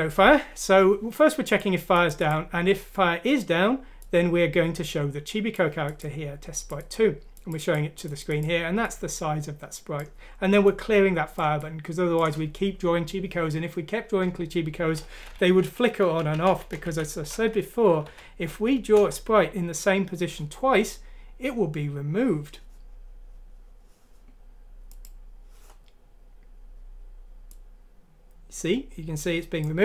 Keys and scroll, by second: 15.3 Home, 15.5-16.9 typing, 16.5 Down, 16.7 Home, 18.1 F6, 19.0 Return.